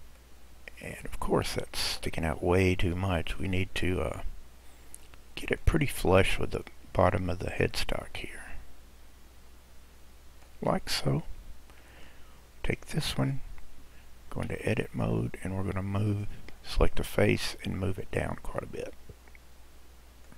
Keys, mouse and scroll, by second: 3.3 KP_Decimal, 4.1-4.7 scroll down 1, 4.7-5.1 scroll down 1, 5.1-7.8 middle drag, 7.8 click, 10.9-13.2 middle drag, 13.2 click, 14.4 Tab, 16.1 click, 17.8 click.